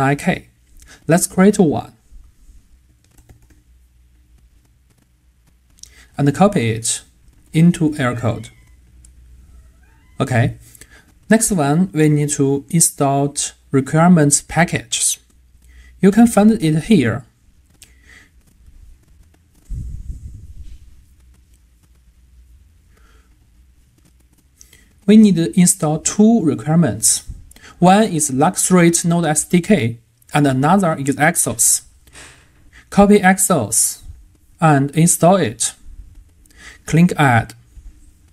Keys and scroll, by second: 8.5 super+v, 33.1 super+c, 35.0 super+v.